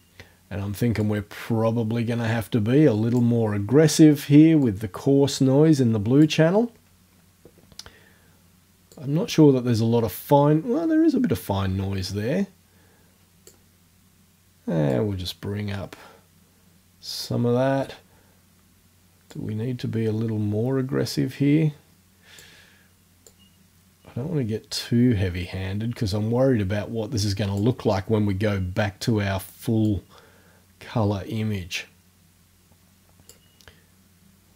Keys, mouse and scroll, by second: 1.1-3.4 drag, 4.7-6.5 drag, 8.9-13.7 drag, 14.9-17.5 drag, 19.3-22.6 drag, 23.3-27.8 drag, 29.9-33.5 drag.